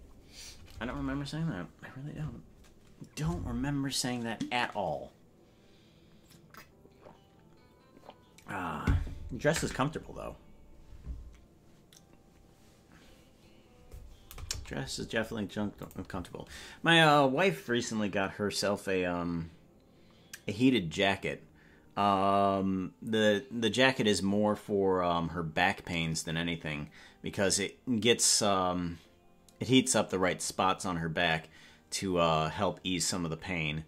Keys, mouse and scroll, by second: 15.9 click.